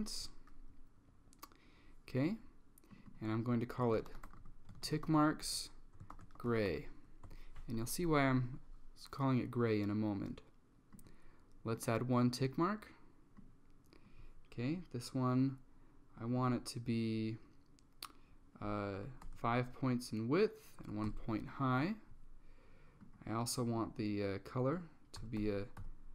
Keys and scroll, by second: 3.7-7.3 typing, 7.4 Return, 19.1 typing, 19.3 Tab, 20.9 1, 21.1 Tab, 25.3-26.1 typing.